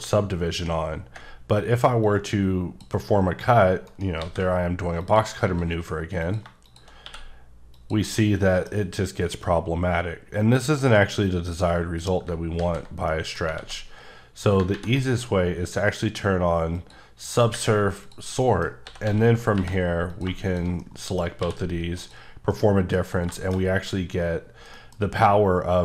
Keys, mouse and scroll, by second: 2.0 click, 3.9 shift+right click, 4.2 shift+a, 5.0 click, 5.5 s, 6.2 click, 7.0 q, 7.7 click, 8.4 middle click, 8.7 scroll down 1, 12.3 ctrl+scroll down 1, 12.6 ctrl+z, 13.1 middle click, 13.6 a, 16.8 click, 18.0 click, 18.4 middle click, 18.9 s, 19.0 x, 19.5 y, 20.1 click, 20.8 middle click, 21.4 q, 21.9 click, 22.5 middle click, 23.0-23.6 scroll up 2, 23.3 middle click, 24.5 scroll down 1, 24.7 middle click, 25.3 scroll down 3.